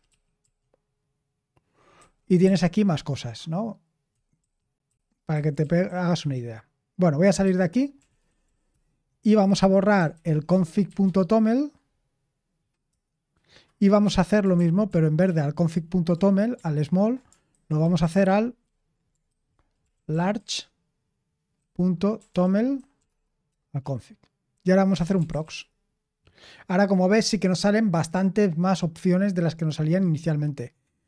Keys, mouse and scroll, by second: 0.0-0.9 typing, 1.9-2.4 typing, 4.1-6.1 typing, 7.4-11.3 typing, 12.8 Return, 14.5 ctrl+p, 14.8 ctrl+p, 15.2 ctrl+p, 15.6 ctrl+p, 17.5 alt+b, 17.8 alt+b, 18.6 a, 19.9 c, 21.9-23.4 typing, 23.4 Return, 24.6-25.9 typing.